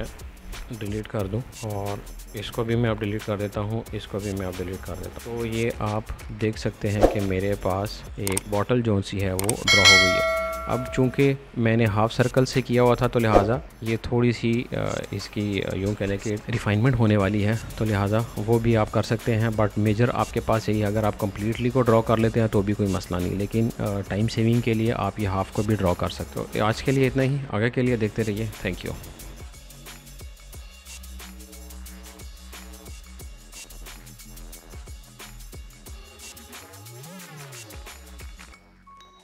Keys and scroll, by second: 0.5 Delete, 2.4 Delete, 3.8 Delete, 5.5 m, 26.8 ctrl+z, 28.4 space.